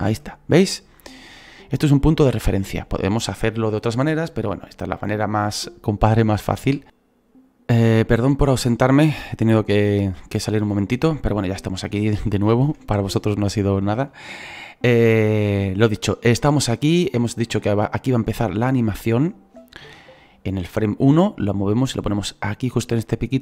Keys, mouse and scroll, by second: 6.8 ctrl+z, 6.8-10.4 scroll down 5, 10.4-14.5 shift+middle drag, 14.5-15.0 scroll up 2, 15.0-16.1 shift+middle drag, 16.1-16.5 scroll up 4, 16.5-21.4 shift+middle drag, 21.7-23.4 drag.